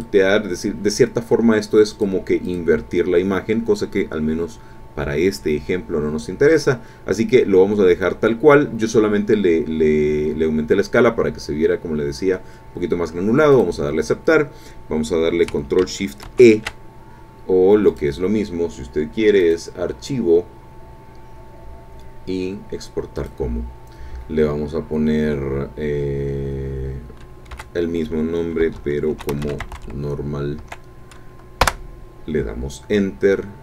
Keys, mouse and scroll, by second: 1.9 click, 2.4 click, 13.5 click, 16.2 ctrl+shift+e, 17.9 click, 19.4 click, 23.2 click, 23.5-25.8 middle drag, 27.5 Right, 28.7-29.7 typing, 28.7 Caps_Lock, 30.6 Caps_Lock, 31.9 Return.